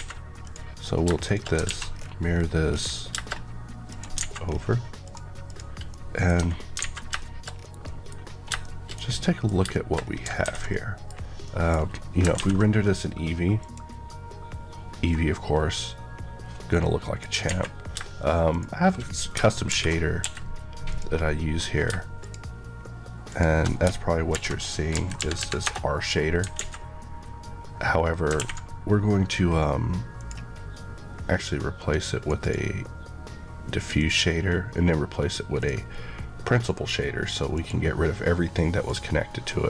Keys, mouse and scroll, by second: 0.4 click, 1.0 shift+click, 1.4 click, 1.6 alt+x, 1.9 scroll down 1, 2.6 scroll down 1, 3.8 click, 4.1 alt+a, 4.4-5.0 scroll up 1, 5.0 click, 5.8 middle click, 6.7 alt+a, 7.1 shift+middle click, 7.5 scroll down 1, 7.8 middle click, 8.5 middle click, 8.8 shift+scroll down 2, 9.2 middle click, 10.0 shift+scroll down 2, 10.4 ctrl+s, 10.7 middle click, 12.3 ctrl+s, 13.5 click, 15.1 middle click, 17.4 a, 18.5 click, 19.7 alt+m, 20.2 Escape, 20.8 click, 21.6-22.2 scroll up 2, 22.2 shift+click, 23.3 shift+Left, 24.2 alt+m, 24.9 Down, 25.6 Return, 26.5 alt+a, 28.0 a, 30.1 click, 33.9 click.